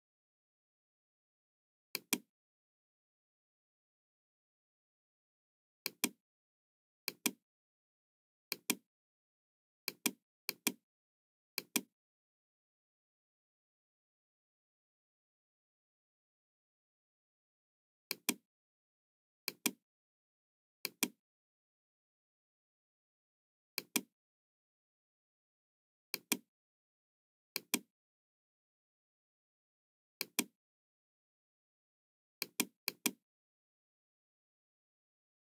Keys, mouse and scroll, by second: 1.9 click, 3.3-4.3 middle drag, 5.7 click, 6.9 click, 8.4 click, 9.8 click, 10.5 click, 11.5 click, 12.1-16.4 middle drag, 18.0 click, 19.4 click, 20.7 click, 23.7 click, 26.1 click, 27.4 click, 30.2 click, 32.3 click, 33.0 click, 34.1 KP_3, 34.4 KP_0, 34.6 Return.